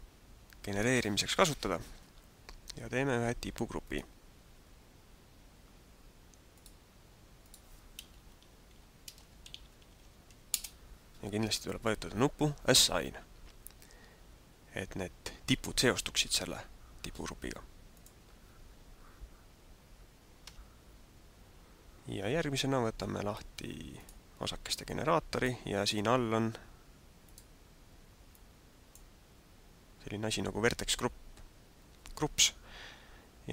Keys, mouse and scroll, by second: 3.7 click, 6.5 click, 7.4 click, 18.0 click, 20.5 Tab, 23.9 click, 24.9 click, 27.2 click, 28.3 click.